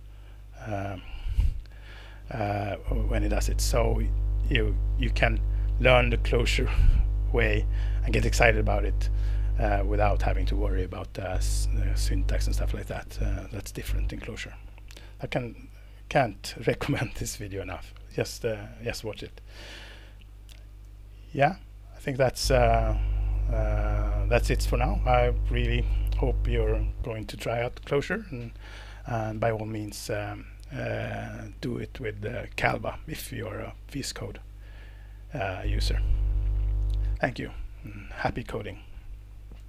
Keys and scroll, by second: 19.3 super+Tab, 20.8 super+Tab, 39.6 super+Tab.